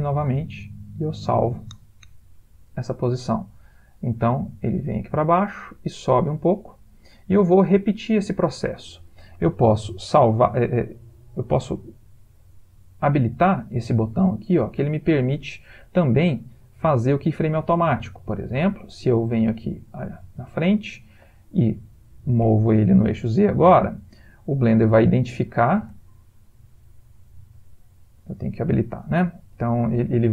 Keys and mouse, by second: 3.2 click, 18.9 click, 22.5 g, 27.9 click, 29.6 g.